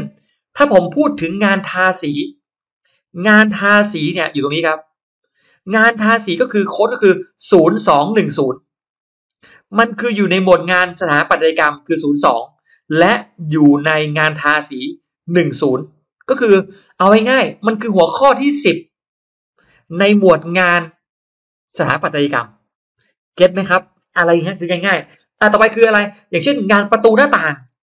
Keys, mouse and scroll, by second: 2.7 click, 3.2-5.8 drag.